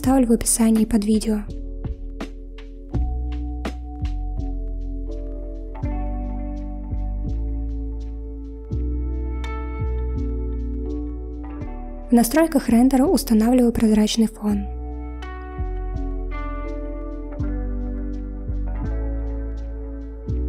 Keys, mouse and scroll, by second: 13.4 click, 16.6-19.7 drag, 20.2 click.